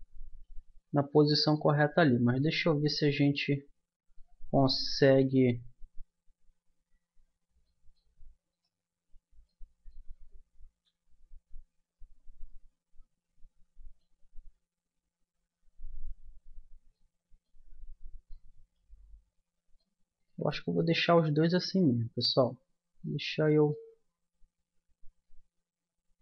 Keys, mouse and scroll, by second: 1.2 n, 4.1-6.5 middle drag, 5.8 Tab, 6.5 Tab, 7.6-9.6 middle drag, 10.8 ctrl+z, 18.5-21.2 middle drag, 21.8-25.0 middle drag.